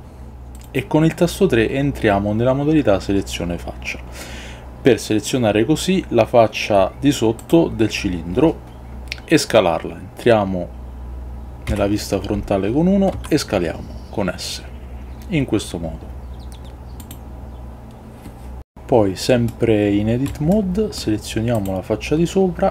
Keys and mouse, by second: 11.8 KP_1, 20.4 shift+middle click.